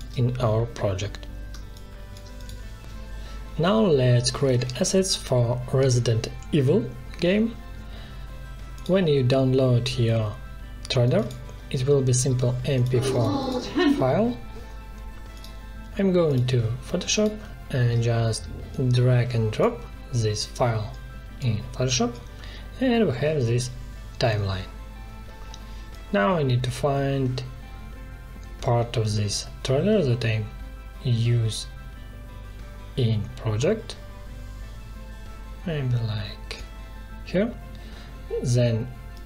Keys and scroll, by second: 1.5 space, 16.3 space, 19.6 space.